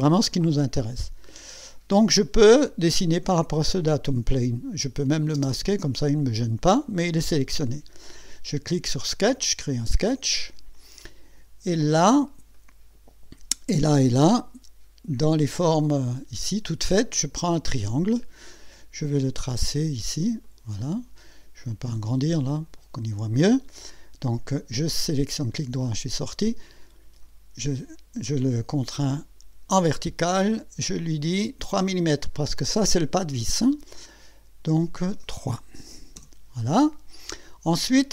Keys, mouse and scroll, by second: 1.0-1.8 drag, 3.8 click, 5.4 space, 9.0 click, 10.2-10.5 scroll up 2, 11.0-11.5 right drag, 11.7-12.1 scroll up 1, 12.5-13.1 right drag, 15.2 click, 17.2 click, 19.2 click, 20.4 click, 21.2 right click, 22.4 right click, 25.2 right click, 26.7 click, 29.1 click, 32.3 click, 34.6 click, 36.2 KP_Enter, 37.0 scroll up 2, 37.5 scroll down 2.